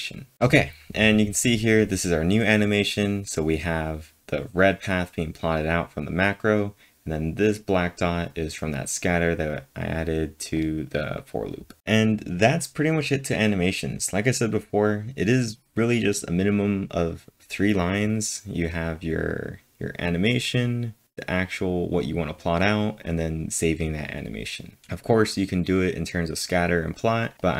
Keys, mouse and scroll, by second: 10.5 click, 24.8 click, 25.7 click.